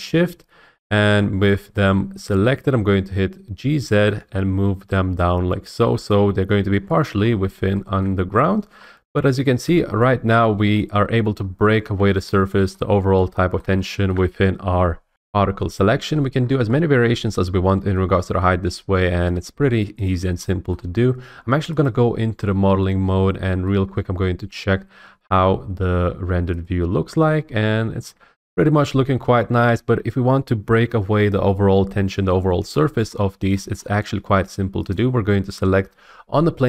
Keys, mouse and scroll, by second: 0.0 Tab, 3.5 g, 3.7 z, 6.1 click, 6.6 middle click, 7.2-7.5 scroll, 8.0-8.6 scroll, 8.6 scroll up 4, 8.8 middle click, 9.6 Tab, 10.7 shift+middle click, 10.7 scroll, 11.4-12.0 scroll, 12.7 shift+middle click, 13.6 shift+middle click, 15.1 F8, 16.3 scroll, 17.9-18.2 scroll, 19.3 click, 20.1 click, 21.8 click, 22.5 middle click, 22.8 scroll, 23.6 middle click, 23.8 middle click, 23.9 middle click, 26.6 click, 28.5 click, 29.6-31.7 middle drag, 33.1 middle click, 33.1-33.9 scroll, 34.9 click.